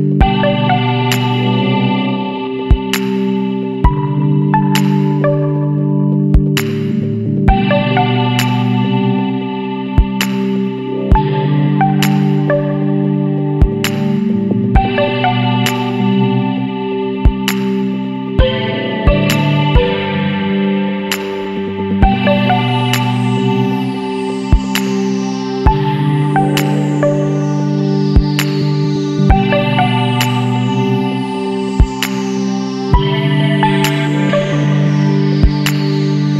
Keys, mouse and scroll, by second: 0.2-3.2 drag, 3.4-4.4 middle drag, 4.4 KP_1, 5.0 Tab, 5.4 1, 6.4 click, 7.3 click, 9.6 click, 14.0 KP_7, 14.4 Tab, 15.3 KP_1, 15.5 Tab, 18.4 Tab, 19.8-20.2 scroll up 1, 21.1-24.1 drag, 26.8 Tab, 27.9 KP_7, 29.8 click, 30.7 click, 33.0 click, 34.2 click, 34.8 click.